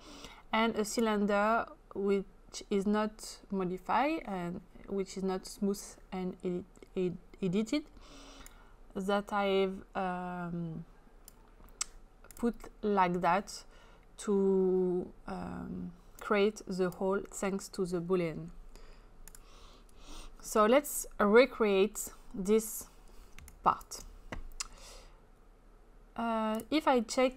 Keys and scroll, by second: 23.4 space.